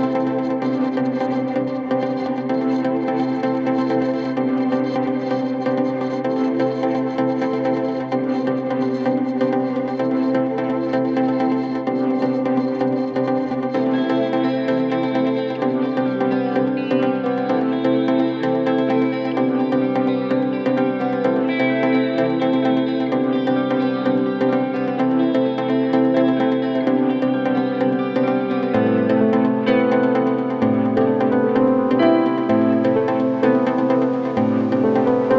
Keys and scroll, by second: 25.0 KP_Add, 30.8 KP_Add.